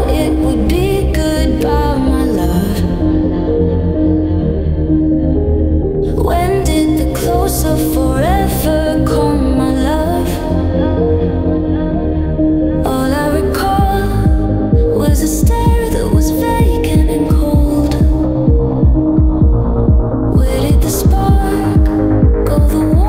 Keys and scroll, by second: 3.4 Delete, 4.8 ctrl+z, 6.7 m, 6.8 o, 7.0 n, 7.3 t, 8.0 Down, 9.2 scroll, 9.7 Return, 10.8 ctrl+z, 12.6 ctrl+z, 14.8 alt+Right, 16.2 ctrl+z, 18.9 ctrl+z.